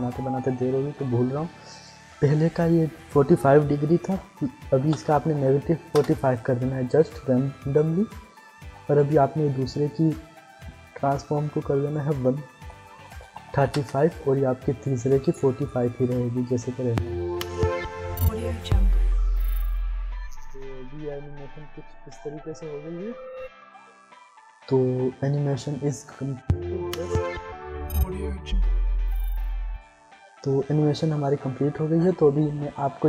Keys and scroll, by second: 4.7-5.8 typing, 5.9 Return, 12.0-13.4 typing, 13.7 Return, 16.7 Insert, 29.6 space.